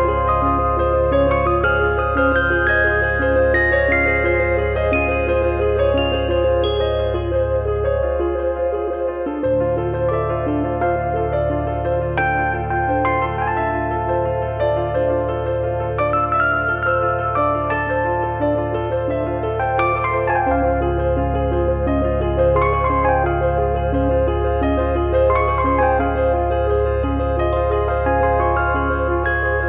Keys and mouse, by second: 0.1 click, 0.7 click, 1.1 click, 2.6 click, 9.7 click, 10.9 click, 12.2 click, 13.2 click, 14.2 click, 16.3 click, 17.4 click, 18.3 click, 20.7 click, 21.9 click, 25.9 click, 26.8 click, 28.4 click.